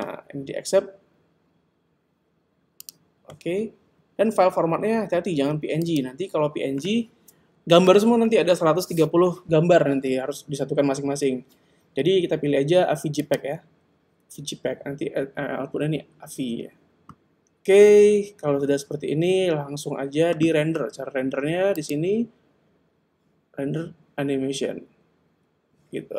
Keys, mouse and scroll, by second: 5.9 click, 21.7 click.